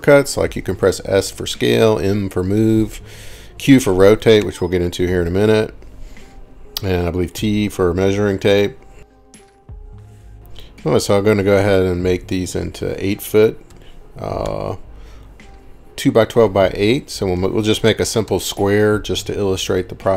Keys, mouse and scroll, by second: 2.9 Escape, 4.4 s, 5.5 s, 12.7 8, 13.7 ', 14.5 Return, 17.3-18.4 typing.